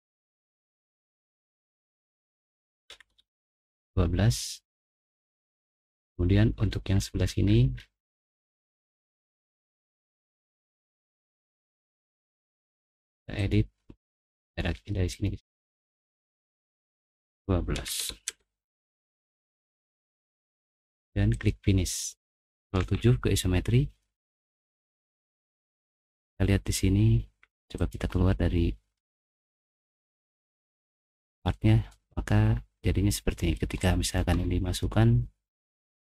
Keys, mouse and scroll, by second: 0.6 click, 1.1 Escape, 2.6-3.6 typing, 5.0 middle click, 5.5 middle click, 5.9 middle click, 6.0 scroll down 1, 6.0 middle click, 6.6 middle click, 6.6-8.0 scroll up 4, 7.0 middle click, 7.2 middle click, 7.7 middle click, 8.8 Escape, 9.5 Escape, 9.9 click, 12.2 click, 13.4 right click, 14.4 click, 15.1 click, 17.5-18.5 typing, 19.6 click, 21.3 click, 22.7 ctrl+7, 24.4 middle click, 24.4 scroll up 2, 24.9 middle click, 24.9-26.1 scroll down 3, 25.3 middle click, 26.0 middle click, 27.7 click, 28.9 scroll up 1, 29.3 scroll down 1, 29.6-31.4 middle drag, 31.6-32.0 scroll down 1, 31.9-33.4 middle drag, 33.4 click, 33.8 click, 34.3 middle click, 34.7 scroll down 1, 34.8 middle click, 36.0 scroll down 1.